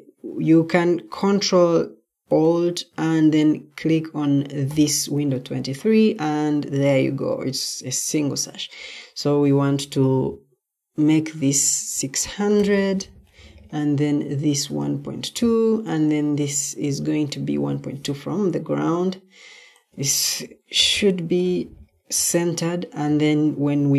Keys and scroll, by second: 12.1-13.1 typing, 20.1-21.3 typing.